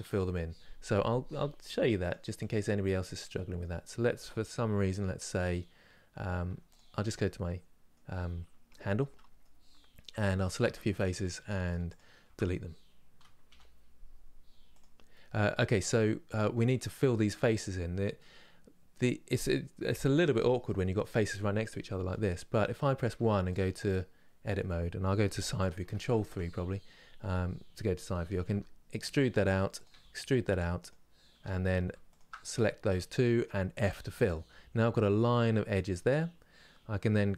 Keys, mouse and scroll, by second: 1.6 click, 2.0 click, 2.6 middle click, 3.5 scroll up 2, 6.1 Tab, 6.4 click, 6.6 Tab, 6.9-9.7 middle drag, 9.7 3, 10.0 click, 10.7 shift+click, 14.4 Delete, 14.8-22.7 middle drag, 22.7 1, 23.5-25.6 middle drag, 25.6 ctrl+KP_3, 28.1 e, 31.8 shift+click, 32.1-33.5 middle drag, 33.5 f, 33.8-35.6 middle drag, 35.6-35.9 scroll up 2, 37.1 2.